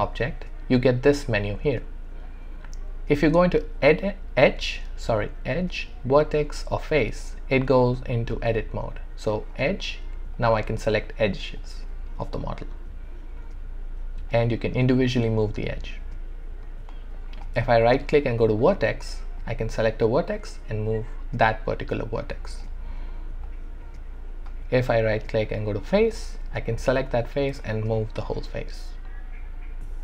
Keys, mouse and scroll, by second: 10.3-17.4 drag, 17.4-19.4 right drag, 19.4-24.9 drag, 25.0-26.6 right drag, 26.6-30.0 drag.